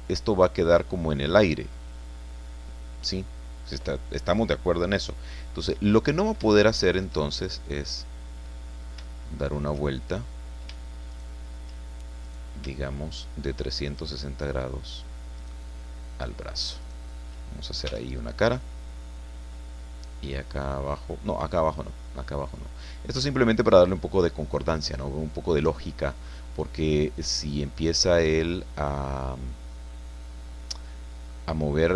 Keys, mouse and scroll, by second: 5.3-6.4 drag, 6.6-8.1 shift+drag, 8.2-8.6 scroll up 2, 9.6 shift+right click, 10.1 shift+right click, 11.1 shift+right click, 12.2 right click, 13.9 shift+right click, 15.4 shift+right click, 16.8 shift+right click, 17.8 f, 18.4-23.9 drag, 24.3 scroll up 2, 24.6-24.9 scroll down 2, 25.3-26.3 drag, 26.8-31.5 drag.